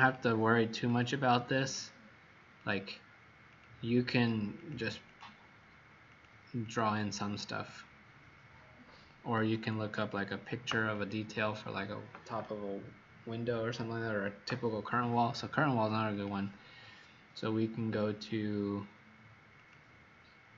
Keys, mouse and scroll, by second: 0.8 click, 4.0 click, 4.5 click, 5.0 click, 6.0 click, 6.5 click, 9.9 click.